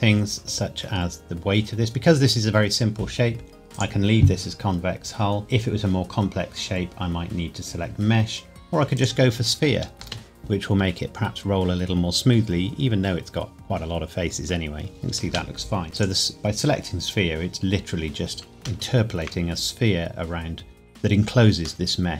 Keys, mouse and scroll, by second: 3.7 click, 8.9 click, 10.0 space, 15.2 space, 15.9 click, 17.9 scroll up 1, 18.8 shift+middle click, 20.3-21.8 scroll up 2, 21.8 middle click.